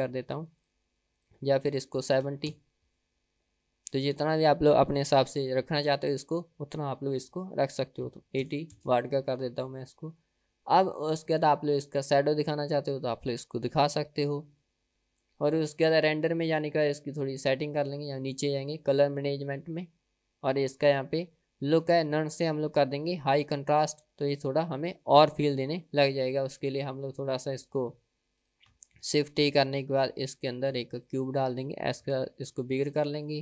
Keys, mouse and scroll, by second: 6.6-10.2 drag, 16.9 click, 17.5-19.2 scroll down 6, 19.2 click, 19.6-20.6 scroll down 4, 21.9-24.4 drag, 26.0 click, 27.9 drag, 28.5 drag, 29.2 shift+a, 32.2 s.